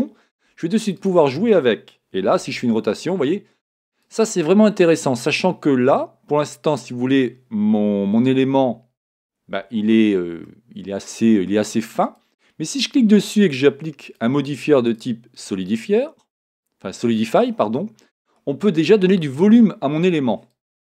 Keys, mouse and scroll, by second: 1.0 click, 2.4 r, 4.1 click, 5.7-12.0 middle drag, 7.0-9.5 scroll up 2, 9.5 Tab, 12.0 click, 14.0 click, 14.8-17.7 drag, 17.7-20.5 middle drag, 20.5-20.9 drag.